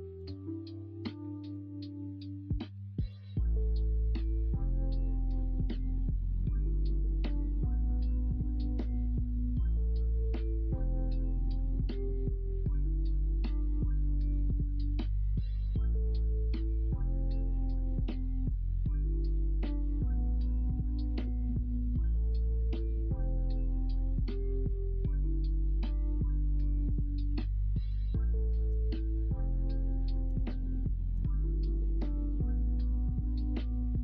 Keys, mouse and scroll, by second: 2.3-7.5 middle drag, 6.5 scroll up 1, 6.7-7.5 scroll down 1, 7.5 2, 9.6 ctrl+b, 11.3 middle click, 13.1-14.1 middle drag, 14.8 l, 16.7 middle click, 22.3 click, 22.5 middle click, 23.1 click, 23.8 middle click, 24.5 middle click, 24.9-27.8 drag, 27.8 3, 29.0 3, 29.7 middle click.